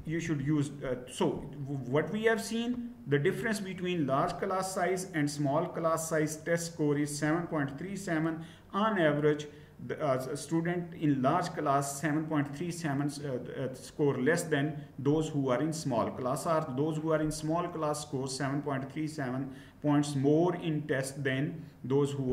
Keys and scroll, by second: 0.0-0.4 typing.